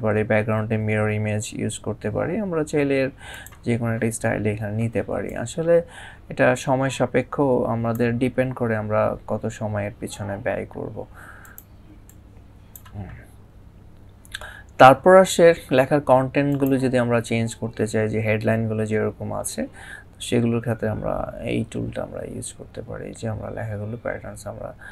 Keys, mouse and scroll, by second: 3.1 click, 5.1 click, 11.2 click, 16.3 click.